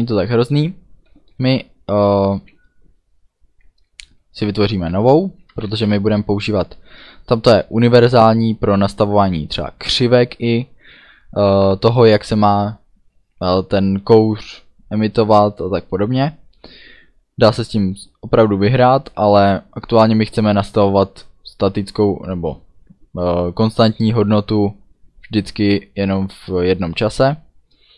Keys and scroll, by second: 5.3-6.2 typing, 7.4 space.